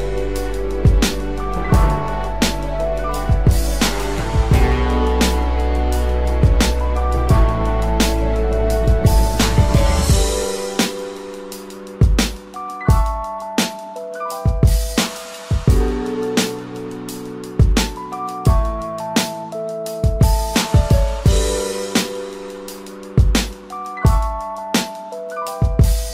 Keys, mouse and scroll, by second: 25.1 double click.